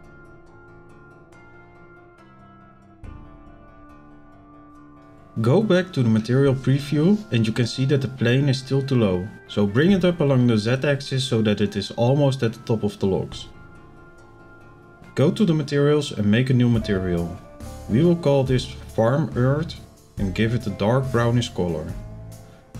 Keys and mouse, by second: 0.7 click, 0.9 click, 1.9-3.8 drag, 4.9 z, 5.8 middle click, 8.0 z, 9.4-14.0 drag, 15.7 click, 17.1 click, 19.7 click, 20.4 click, 20.5-22.7 drag.